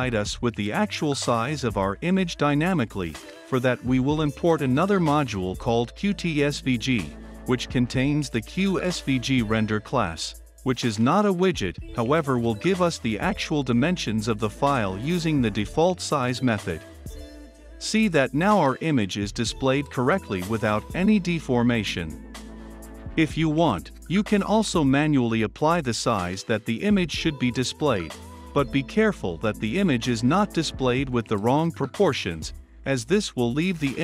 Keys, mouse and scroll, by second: 0.0-9.0 typing, 0.0 click, 4.0 Return, 6.2 click, 7.8 Return, 8.9-11.6 drag, 11.4-17.2 typing, 13.4 Return, 18.5 click, 19.5 ctrl+F5, 31.0 <, 31.4 space, 32.1 ctrl+F5, 33.8-34.0 drag.